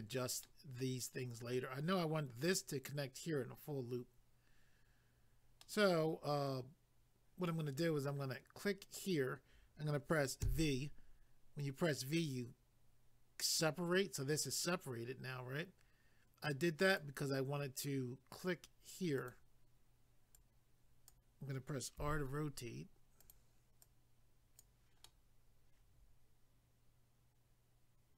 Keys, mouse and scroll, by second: 0.4 middle click, 5.6 middle click, 9.0 click, 10.4 v, 13.4 click, 16.9 click, 19.2 click, 20.3 click, 22.0 r, 23.2 click, 23.8 click, 25.0 middle click.